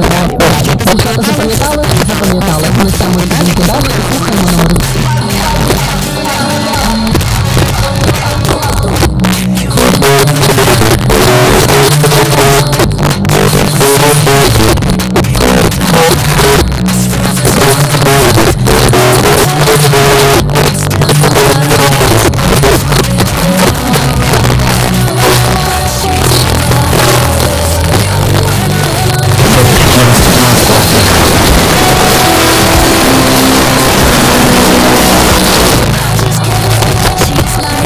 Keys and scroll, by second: 35.3 Page_Down.